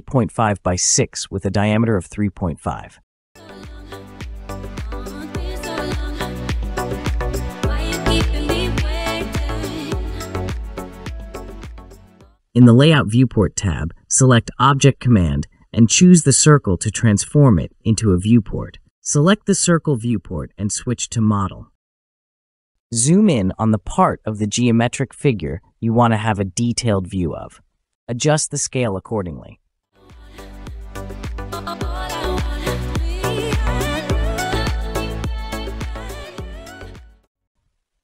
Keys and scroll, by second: 0.8 Return, 1.6-2.5 typing, 4.5 typing, 5.6 Return, 8.0-8.4 typing, 9.1 Return.